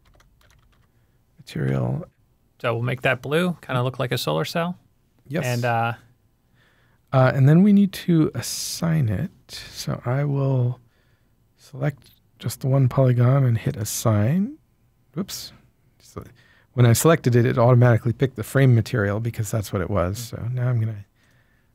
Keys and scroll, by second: 0.0-0.7 typing, 1.6 Return, 2.9-3.3 typing, 9.5 Tab.